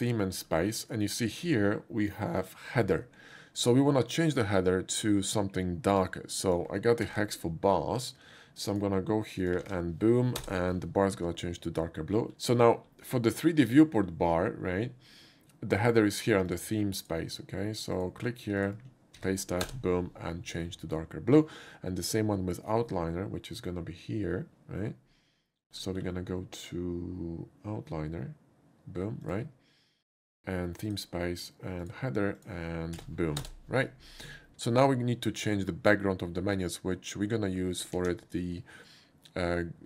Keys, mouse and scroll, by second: 0.0 click, 0.4 middle click, 6.1 click, 6.1 middle click, 7.1 ctrl+c, 8.7 click, 9.4 click, 9.6 ctrl+v, 10.4 Return, 12.1 middle click, 12.1 scroll up 1, 12.8 middle click, 12.8 scroll up 1, 14.6 scroll down 1, 16.5 click, 17.0 click, 18.0 click, 18.6 click, 19.2 ctrl+v, 19.6 Return, 22.8 middle click, 26.0 scroll down 1, 29.2 click, 30.9 click, 31.8 click, 32.4 click, 33.0 ctrl+v, 33.4 Return, 33.5 ctrl+v, 38.0 ctrl+c.